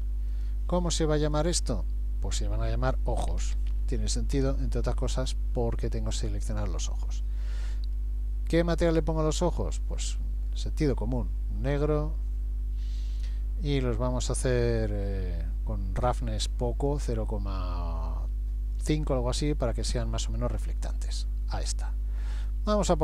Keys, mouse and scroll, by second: 0.3 click, 3.6 o, 8.0 scroll down 2, 9.0 click, 12.8-13.5 scroll down 1, 16.1 click, 21.0 middle click, 22.4 click.